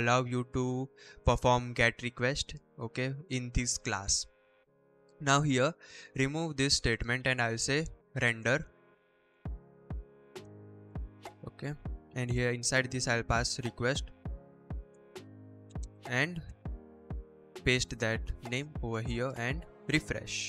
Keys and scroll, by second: 0.3 BackSpace, 1.1 shift+Right, 2.3 shift+Down, 2.9 shift+Right, 4.1 Right, 4.6 Right, 5.0 BackSpace, 7.8-12.2 typing, 13.4-16.2 typing, 17.1 ctrl+v, 17.6 ctrl+s.